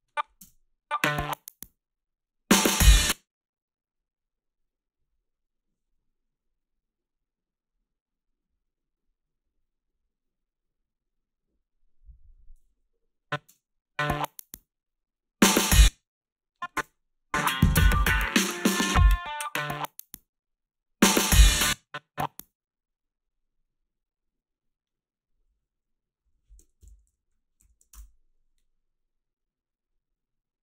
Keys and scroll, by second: 0.4 space, 2.9 space, 13.5 space, 15.6 space, 16.8 space, 21.5 space, 26.8 shift+m, 27.9 e.